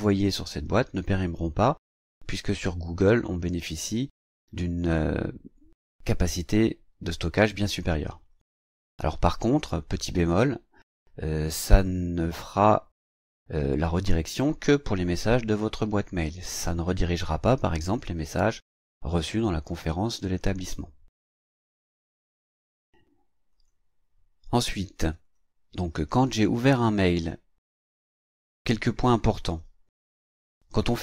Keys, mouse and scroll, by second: 12.5 click, 17.6 click, 19.1 click, 23.5 click, 25.0 click, 26.4 click, 27.9-29.0 drag.